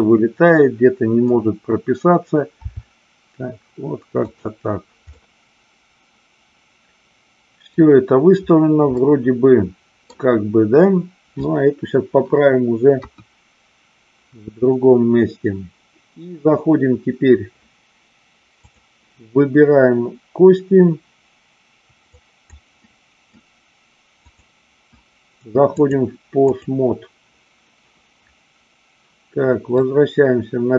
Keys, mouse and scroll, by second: 2.6 r, 4.2 click, 5.1-7.8 middle drag, 8.9-10.1 middle drag, 13.0 KP_1, 18.5 click, 22.0 click, 22.9 middle click, 25.6-26.6 drag, 29.8-30.7 drag.